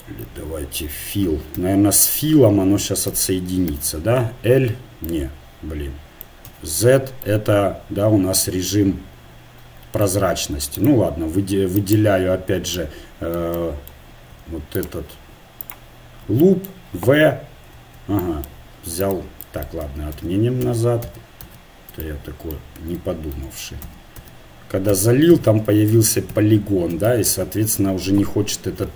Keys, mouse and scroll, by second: 1.5 a, 3.1 a, 3.6 a, 4.3 l, 5.5-6.5 middle drag, 6.5 z, 6.9-9.2 middle drag, 10.8-13.5 right drag, 12.8-15.4 middle drag, 14.8-16.1 right drag, 17.1 v, 17.7 v, 19.0 click, 19.9 ctrl+z, 20.2 ctrl+z, 20.6 ctrl+z, 21.0 ctrl+z, 21.4 ctrl+z, 23.4 ctrl+z, 23.8 ctrl+z, 24.7 ctrl+z, 24.9 ctrl+z, 25.3 ctrl+z, 26.3 KP_1.